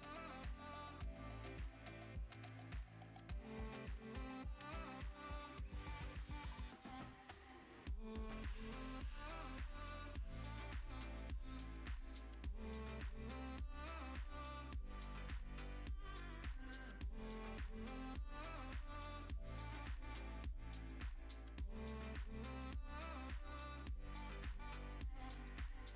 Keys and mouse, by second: 0.1 middle click, 0.4 g, 0.6 click, 0.7 middle click, 0.9 g, 1.1 click, 1.5 KP_0, 1.9 click, 2.3 KP_0, 3.5 click, 4.2 click, 7.1 click, 10.0 click, 10.3 KP_0, 10.3 KP_0, 11.9 click, 13.9-15.6 shift+drag, 16.2 click, 16.4 click, 18.8 ctrl+s, 19.1 click, 19.2 g, 19.8 click, 21.3 ctrl+s, 21.7 shift+click, 21.8 shift+a, 23.1 s, 23.4 click, 23.4 g, 23.8 click, 23.9 s, 24.0 click, 24.1 g, 24.3 click, 24.3 middle click, 25.1-25.9 typing, 25.4 click, 25.5 middle click.